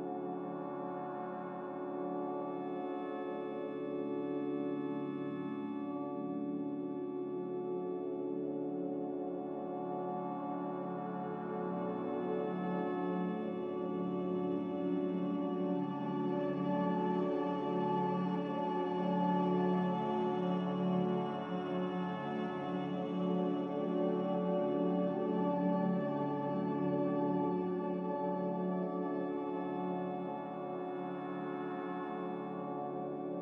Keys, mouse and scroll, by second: 3.1 s, 9.2 z, 10.2 Delete, 11.4 c, 13.4 c, 14.3 z, 16.6 Delete, 17.6 a, 20.7 ctrl+c, 21.1 ctrl+v, 23.3 ctrl+v, 24.6 ctrl+v, 31.6 ctrl+v, 32.2 ctrl+c, 32.4 ctrl+v, 33.1 ctrl+c, 33.3 ctrl+v.